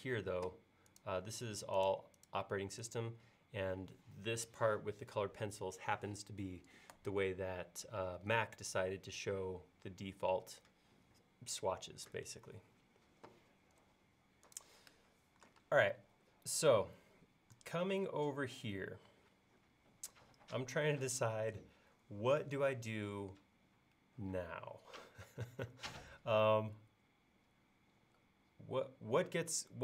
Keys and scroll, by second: 15.7 space.